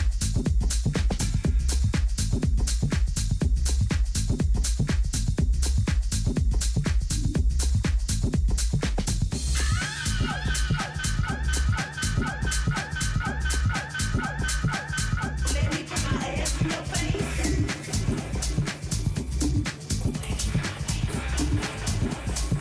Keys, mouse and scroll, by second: 0.5 KP_3, 4.2-6.2 drag, 5.2 z, 6.0-7.8 middle drag, 11.1 KP_7, 14.0-15.7 drag, 15.0-19.3 typing, 16.4 middle click, 21.8 a, 22.3 z.